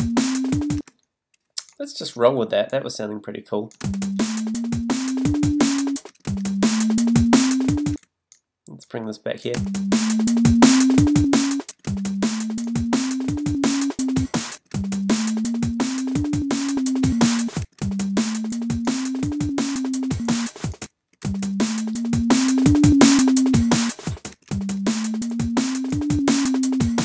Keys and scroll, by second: 0.8 space, 6.1 space, 7.9 space, 24.3 space.